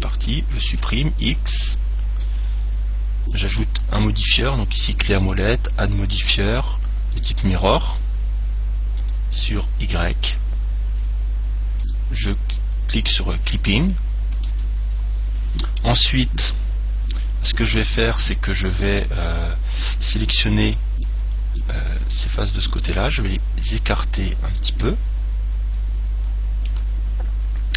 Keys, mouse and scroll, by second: 0.9 x, 3.5 click, 5.5 click, 9.2-11.6 drag, 12.0 click, 14.1-16.4 middle drag, 20.9 b, 23.2 click, 25.6-27.7 middle drag, 27.3-27.7 scroll up 1.